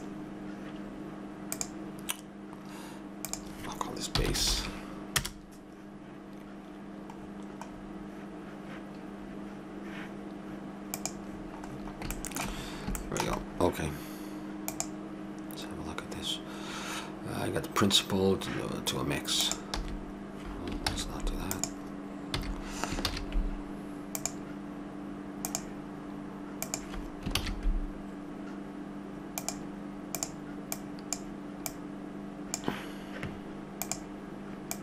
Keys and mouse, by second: 1.5-5.0 drag, 7.7-9.8 middle drag, 10.9-12.6 drag, 11.3-13.2 middle drag, 19.5-20.9 drag, 19.7 x, 20.9 ctrl+z, 21.2 click, 21.5-23.4 drag, 22.3 x, 23.1 shift+a, 27.4 shift+a, 30.7-33.7 drag.